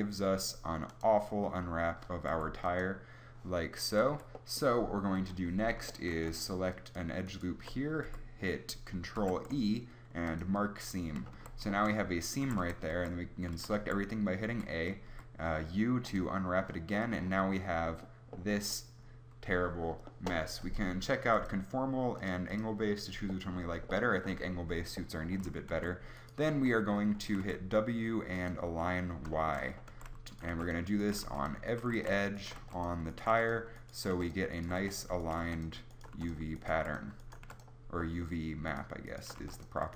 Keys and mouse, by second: 0.9 click, 2.3 u, 4.1 a, 5.2 KP_7, 6.9-9.2 middle drag, 8.0 u, 9.2 ctrl+e, 11.4 a, 12.4-15.1 typing, 25.7 a, 27.4 w, 29.9-37.5 typing, 39.4 w.